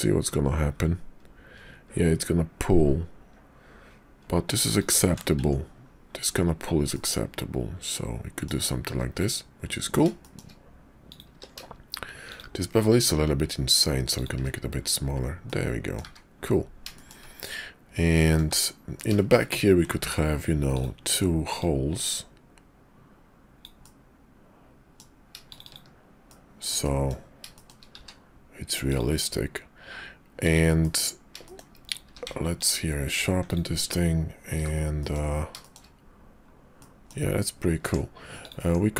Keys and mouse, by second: 5.4 Tab, 6.9-8.5 middle drag, 8.8 `, 10.2 shift+middle click, 11.3 q, 15.4 middle click, 16.0 `, 16.9 shift+middle click, 17.4 middle click, 18.5 `, 19.3 shift+middle click, 20.0 d, 21.5-26.0 drag, 26.3 shift+middle click, 26.8 middle click, 27.5 shift+middle click, 28.0 q, 30.8 middle click, 32.0 q, 33.5 click, 34.5 h, 35.0 middle click, 35.6 shift+middle click, 36.7 middle click, 37.8 Tab, 38.6 Tab.